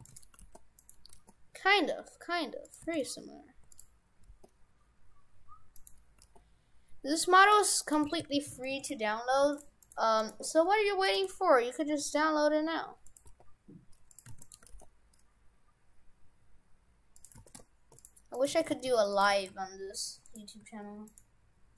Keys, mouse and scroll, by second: 0.1 shift+d, 0.4 g, 1.1 g, 2.9 shift+f, 4.3 g, 6.2 g, 7.9 right click, 8.1 shift+f, 8.8 shift+f, 9.9 right click, 10.2 right click, 10.7 Delete, 11.1 right click, 11.9 s, 13.3 g, 14.3 shift+d, 14.7 g, 17.4 shift+f, 18.4 right click, 18.6 shift+f, 19.3 shift+f, 21.1 shift+right click.